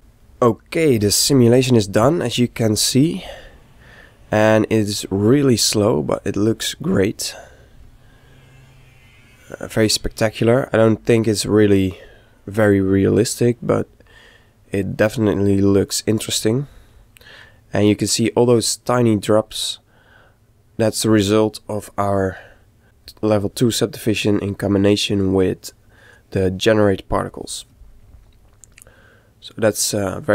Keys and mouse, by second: 3.5-5.2 ctrl+middle drag, 6.0-7.6 middle drag, 8.4-10.1 middle drag, 10.6 middle click, 13.5-15.2 middle drag, 18.1-19.8 middle drag, 22.4 click, 28.7-30.3 middle drag.